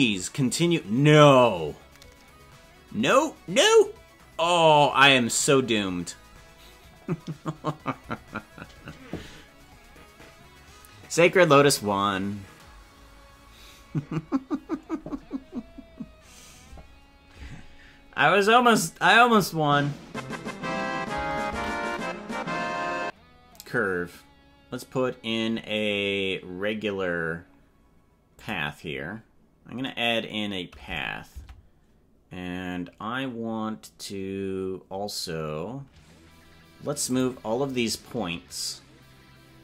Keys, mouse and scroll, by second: 21.5 shift+a, 31.6 Tab, 37.1 click.